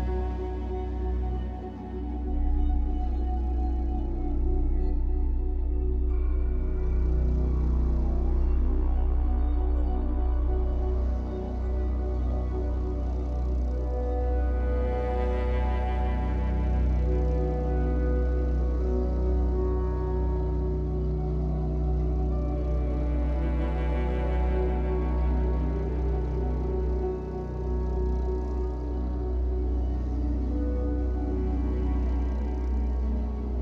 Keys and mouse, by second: 0.0 click, 0.8 click, 2.7 click, 3.7 click, 3.8 click, 8.1 click, 9.0 click, 9.3 click, 10.6-11.6 typing, 12.5-15.6 drag, 16.2 ctrl+s, 18.2-28.6 drag, 30.4 click, 31.1 click.